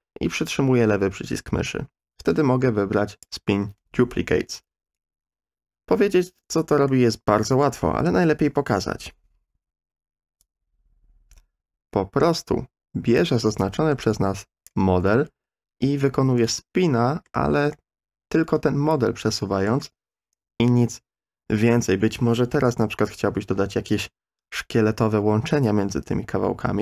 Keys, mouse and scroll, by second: 6.9-8.1 middle drag, 8.7 KP_3, 9.5 KP_1, 10.5-14.9 drag, 16.4-17.2 shift+middle drag, 17.7-19.7 middle drag.